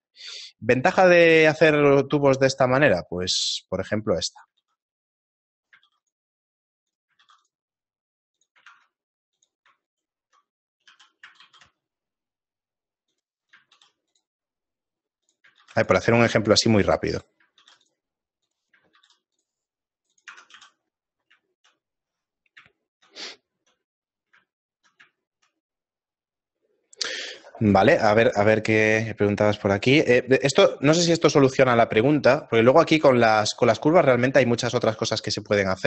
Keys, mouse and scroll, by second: 0.3 Tab, 0.8 middle click, 1.6-2.1 scroll up 5, 2.0 middle click, 2.3 middle click, 3.1 scroll up 1, 3.3 ctrl+r, 4.6 ctrl+r, 5.9 ctrl+r, 7.2 ctrl+r, 8.7 ctrl+Tab, 9.9 alt+right click, 11.0 s, 13.7 ctrl+r, 15.7 ctrl+r, 17.6 ctrl+r, 19.0 ctrl+r, 20.3 Tab, 20.8 scroll down 1, 20.8 a, 21.5 shift+middle click, 21.5 scroll down 3, 21.8 middle click, 22.3 scroll down 1, 22.5 middle click, 22.8 shift+middle click, 24.4 shift+middle click, 24.9 ctrl+middle click, 25.5 shift+middle click, 25.9 middle click, 26.5 middle click, 32.3 right click, 33.0 Tab, 33.9 middle click, 34.8 shift+middle click.